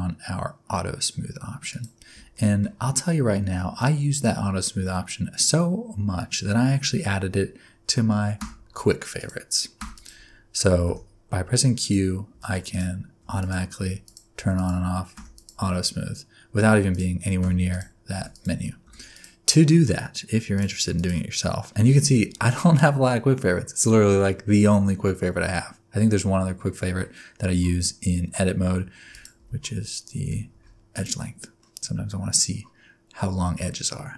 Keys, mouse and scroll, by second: 1.7 click, 2.3 shift+middle click, 8.3 q, 9.7 q, 10.8 q, 12.3-15.1 typing, 16.9 click, 17.4 q, 18.1 q, 18.8 q, 20.5 click, 20.9 click, 21.8 q, 29.1 click, 29.4 Tab, 30.2 a, 30.5 q, 31.6 middle click.